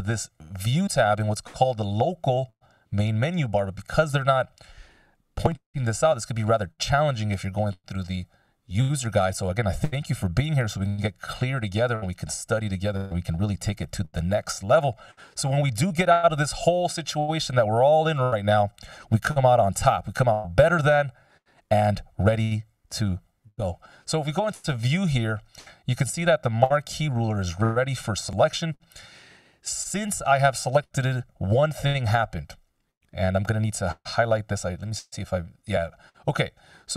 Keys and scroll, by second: 1.0 ctrl+alt+super+m, 31.5 F16.